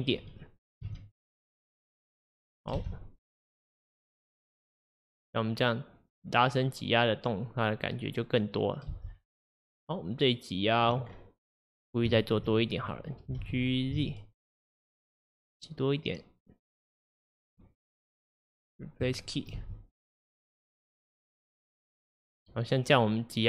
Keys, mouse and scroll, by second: 0.9 s, 2.8 space, 9.0 space, 9.6-11.1 drag, 11.1-11.9 scroll down 3, 11.9-13.3 scroll up 4, 11.9 click, 12.2 shift+middle drag, 13.5 g, 18.4-19.6 right drag, 19.6 space.